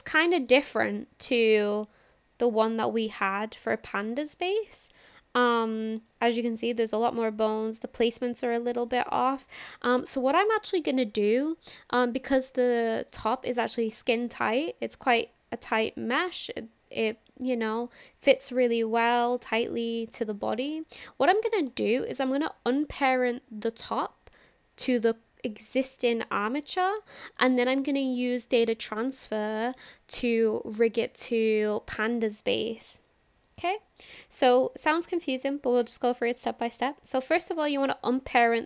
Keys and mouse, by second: 0.1 shift+click, 0.5-3.8 drag, 4.1 shift+drag, 4.5-5.7 middle drag, 6.1 shift+middle click, 6.8 middle click, 7.7 shift+middle click, 9.2 middle click, 10.2-10.5 shift+middle drag, 10.6 middle click, 11.4-11.8 shift+middle drag, 12.0-13.1 middle drag, 13.4-13.7 shift+middle drag, 14.2-20.4 middle drag, 20.9 shift+middle click, 21.8 shift+middle click, 22.3 middle click, 35.9 click.